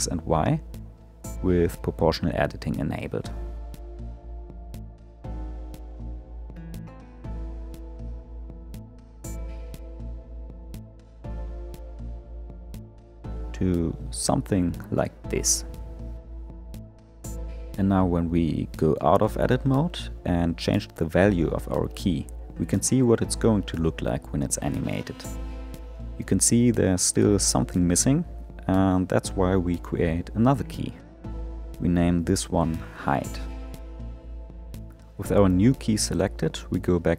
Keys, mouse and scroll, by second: 1.7-2.7 middle drag, 2.7-4.5 drag, 4.5 s, 15.0-15.3 scroll down 2, 15.3-18.0 middle drag, 18.0 Tab, 19.2-22.4 drag, 27.1-30.5 drag, 31.3 click, 31.4-34.7 drag, 35.4 Tab.